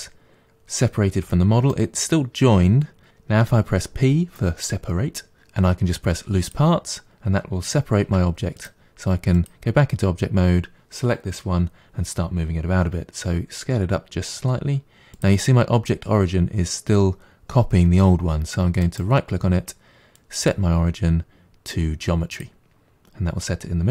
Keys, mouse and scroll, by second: 3.4 p, 8.1 Tab, 8.6 click, 9.4 click, 13.3 s, 18.9-21.9 right drag.